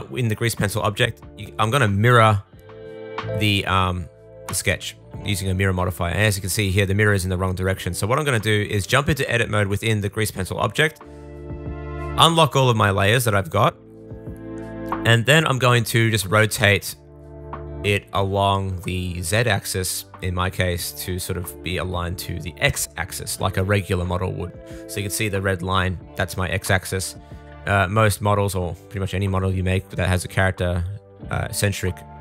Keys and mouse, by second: 4.8-11.8 middle drag, 7.4 Tab, 8.0 a, 11.8-17.7 drag, 13.9 a, 15.0 r, 17.7 super+z, 20.3-25.4 drag, 22.1 r, 25.8 super+z, 26.6 r, 30.1-32.2 middle drag.